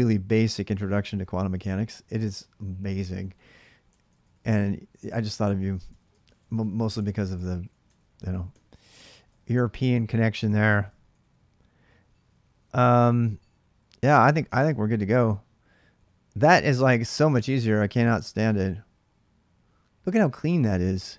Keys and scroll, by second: 3.6-12.4 typing, 5.7 ctrl+[, 14.0-15.7 typing, 17.7 ctrl+[, 17.9-18.5 typing, 18.1 Return.